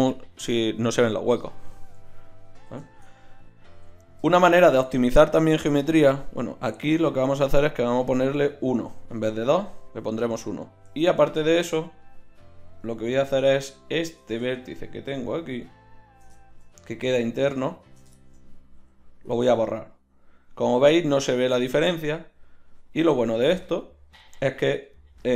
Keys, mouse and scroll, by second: 3.7 KP_1, 6.5 click, 14.8-20.1 right drag, 18.8 x, 20.1-21.9 drag, 23.1 Tab.